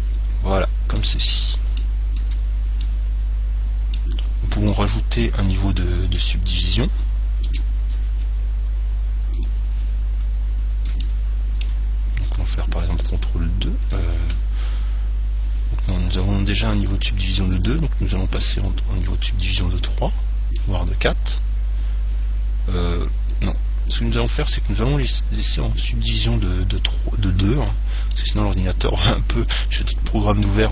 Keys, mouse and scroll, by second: 0.6 middle click, 0.8 click, 2.5 Tab, 4.3-7.1 middle drag, 6.3 KP_1, 7.7 KP_3, 10.4 middle click, 11.1 scroll up 1, 11.3-13.0 middle drag, 13.1 ctrl+2, 17.8-22.0 drag, 21.6-22.0 scroll up 1, 22.0-23.5 middle drag, 23.7 click, 27.9-30.0 middle drag, 30.4-30.7 middle drag.